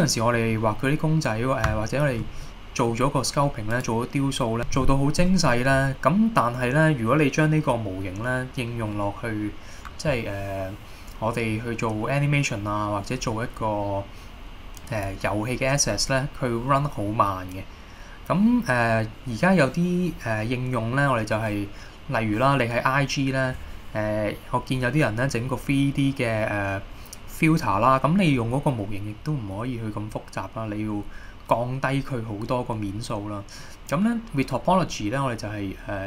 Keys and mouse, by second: 1.0-1.4 middle drag, 1.9 shift+middle drag, 2.6 middle click, 3.8 click, 30.3-31.2 middle drag, 32.2-32.8 middle drag, 33.7 middle click.